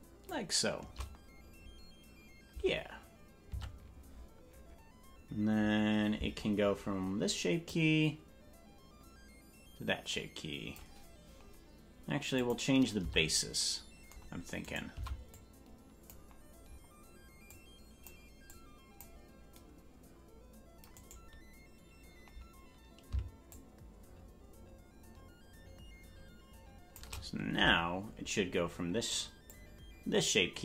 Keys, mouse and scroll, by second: 3.6 Tab, 7.6-10.8 drag, 12.4 click, 13.0 Tab, 14.6 right click, 14.9 c, 23.5-26.9 shift+drag, 27.6 Tab, 29.5-30.6 drag.